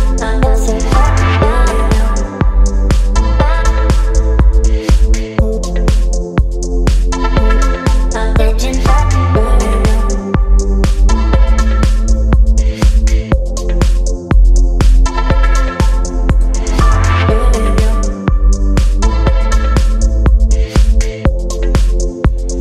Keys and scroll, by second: 14.1 v, 15.2 ctrl+t, 18.4 Return.